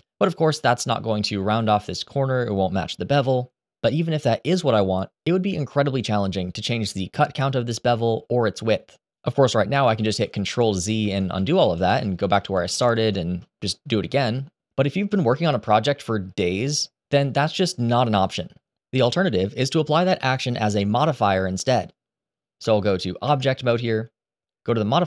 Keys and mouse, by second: 6.6 middle click, 9.4 ctrl+z, 9.7 ctrl+z, 9.9 ctrl+z, 10.2 ctrl+z, 10.4 ctrl+z, 10.7 ctrl+z, 11.1 ctrl+z, 11.3 ctrl+z, 11.6 ctrl+z, 11.9 ctrl+z, 12.1 ctrl+z, 12.4 ctrl+z, 12.7 ctrl+z, 23.0 Tab.